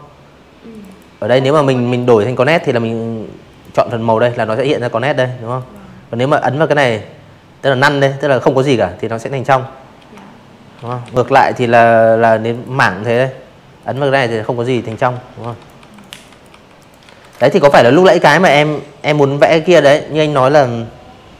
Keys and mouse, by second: 0.4 click, 2.5 click, 5.4 click, 8.0 ctrl+z, 9.5 click, 10.8 click, 11.8 ctrl+z, 12.1-14.7 typing, 12.5 click, 12.9 click, 13.2 click, 13.8 click, 14.2 click, 14.5 click, 14.8 click, 16.6 click, 19.4 click, 20.1-21.2 drag.